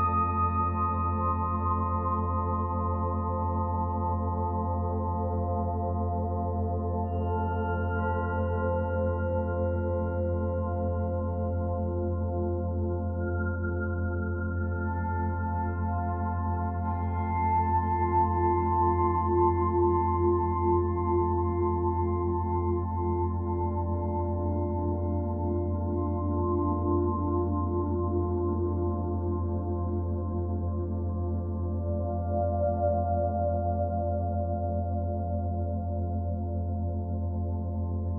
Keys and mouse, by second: 0.0 click, 3.6 click, 4.4-6.2 alt+drag, 6.7 click, 9.5 ctrl+s, 10.6-11.3 drag, 12.8-15.5 drag, 16.7 -, 18.8 click, 22.0 click, 23.8 click, 25.5-26.4 typing, 26.7 Return, 27.8 click, 28.5-30.9 typing, 28.9 click, 29.0 click, 31.2 Return, 32.2 click, 33.0 click, 33.4 click, 34.5 click, 34.9-36.0 typing, 36.2 Return, 38.0 click.